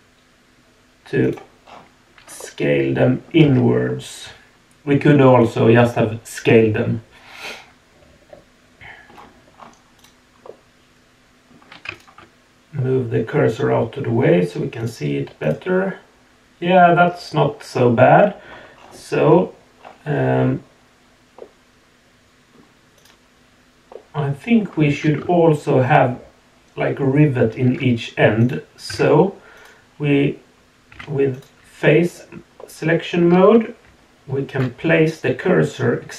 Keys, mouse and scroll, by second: 1.6-2.4 scroll down 3, 2.4-3.1 middle drag, 3.1 click, 3.4 Tab, 3.9-4.2 middle drag, 4.6-5.1 middle drag, 5.2 middle click, 5.4 middle click, 5.6-5.9 middle drag, 6.5-6.9 middle drag, 7.3-8.7 middle drag, 8.7-9.0 drag, 9.0 middle click, 9.1-10.0 scroll down 2, 10.0 click, 10.4-11.5 middle drag, 11.9 shift+right click, 12.8-14.2 middle drag, 14.8 click, 15.4 click, 15.8-18.4 middle drag, 18.7-20.0 scroll up 4, 19.6 middle click, 21.4-22.5 middle drag, 22.9 click, 23.9-24.6 middle drag, 27.2 shift+h, 28.4 click, 28.9 Tab, 29.6 click, 30.9 3, 31.3 click, 32.6-33.2 middle drag, 33.8 shift+s.